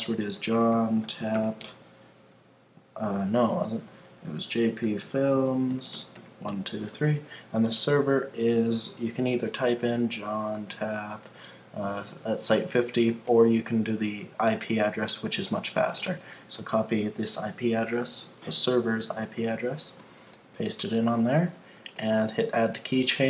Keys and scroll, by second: 18.7 super+c, 20.9 super+v.